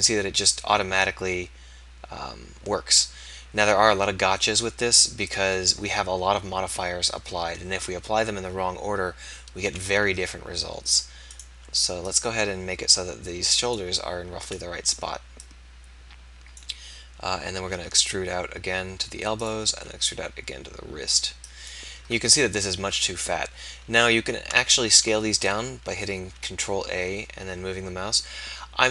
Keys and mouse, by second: 11.4 click, 12.1-13.1 middle drag, 13.1-14.1 drag, 14.4 click, 17.6 e, 19.8 e, 26.2 ctrl+a.